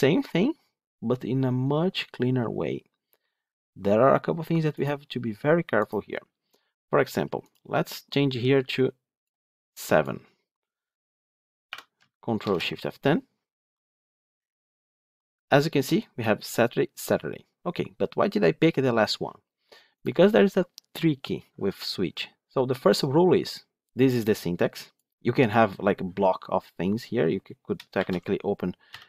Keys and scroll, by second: 12.4 ctrl+shift+F10.